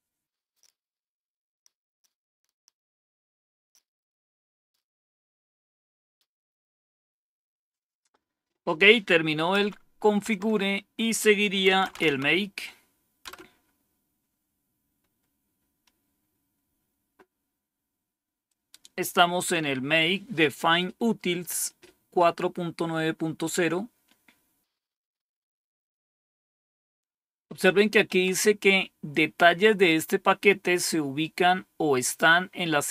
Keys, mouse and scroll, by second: 9.5 Up, 10.2 Down, 11.3-12.5 typing, 13.2 Return, 16.3-17.0 scroll down 1, 18.4-19.4 drag.